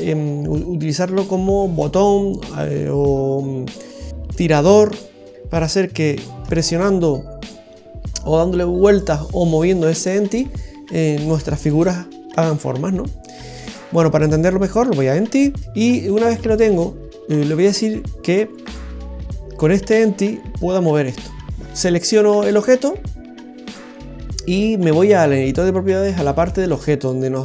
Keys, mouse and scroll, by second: 6.4 shift+a, 18.6 right click.